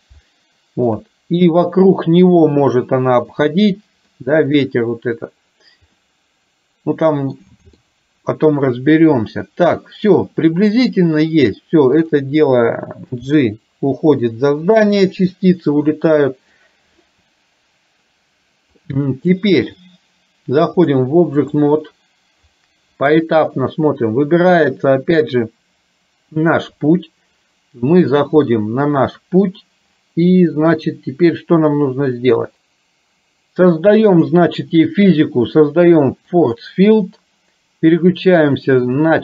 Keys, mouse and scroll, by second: 0.3 shift+middle click, 4.2 middle click, 6.1-7.3 middle drag, 8.0-10.3 middle drag, 13.3 g, 15.5-16.6 middle drag, 18.8 middle click, 20.8 click, 34.2 click, 36.6 click, 38.4-39.2 drag.